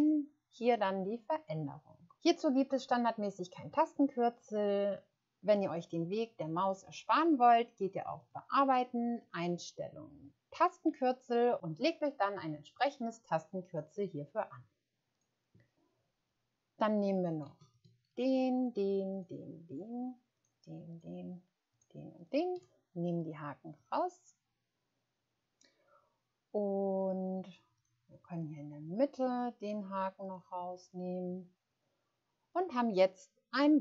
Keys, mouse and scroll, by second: 19.1 shift+click, 21.7 shift+click.